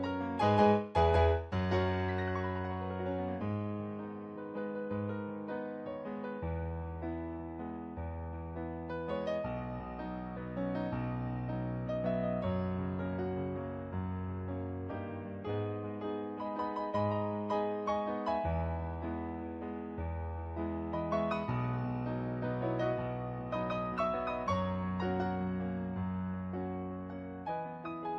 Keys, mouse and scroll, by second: 0.7 ctrl+z, 1.3 ctrl+z, 2.5 ctrl+z, 2.8 ctrl+z, 3.5 ctrl+z, 3.9 ctrl+z, 4.8 ctrl+z, 5.4 ctrl+z, 6.1 ctrl+z, 6.7 ctrl+z, 8.4 ctrl+z, 10.6 ctrl+z, 12.0 ctrl+z, 12.7 ctrl+z, 13.7 ctrl+z, 14.4 ctrl+z, 14.7 ctrl+z, 16.4 ctrl+z, 18.0 ctrl+z, 18.4 ctrl+z, 21.0 ctrl+z, 26.5 ctrl+z, 26.9 ctrl+z, 27.1 ctrl+z.